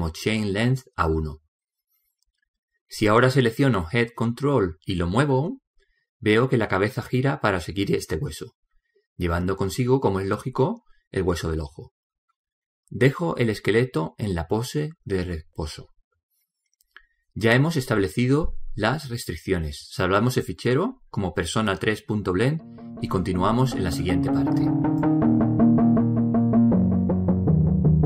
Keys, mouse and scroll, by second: 3.8-5.5 middle drag, 5.5 right click, 6.5 g, 15.1-17.1 middle drag, 15.9 a, 16.2 a, 17.2 alt+r, 17.6 alt+g, 18.1 alt+s, 19.5-20.7 middle drag, 21.0 middle click, 25.6 click.